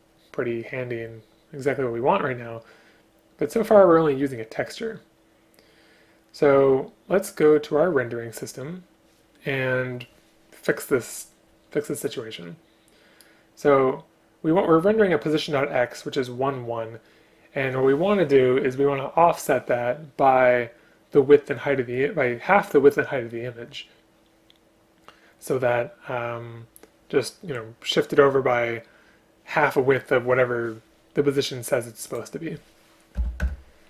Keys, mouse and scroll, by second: 33.2 BackSpace, 33.5 Return.